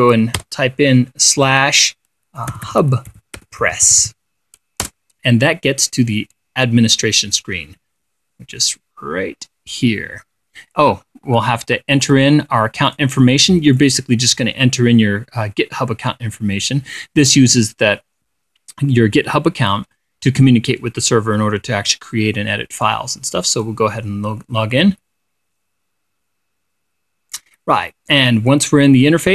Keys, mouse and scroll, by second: 0.9 /, 2.8-4.9 typing, 5.4 Return, 12.5 click, 13.4 click, 14.3 click, 24.0 click.